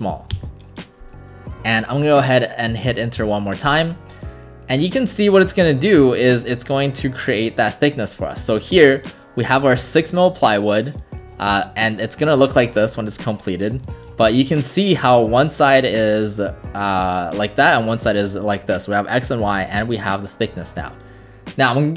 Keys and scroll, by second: 0.4 Return, 3.2 Return.